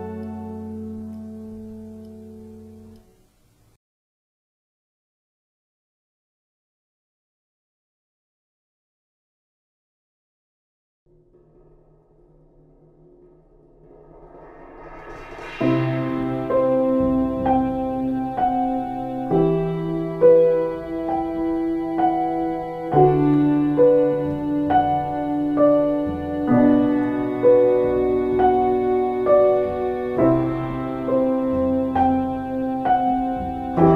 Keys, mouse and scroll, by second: 3.2 alt+space, 4.6 ctrl+;, 19.4 ctrl+space, 21.0 ctrl+;, 22.1 space, 22.5 space.